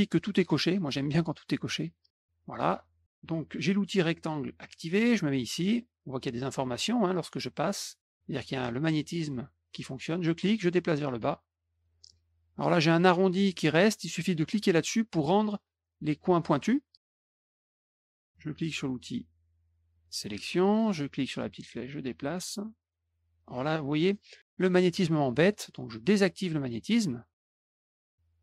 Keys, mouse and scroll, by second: 1.8 click, 10.1-11.8 drag, 14.5 click, 19.9 click, 21.3-25.4 drag, 27.8 click.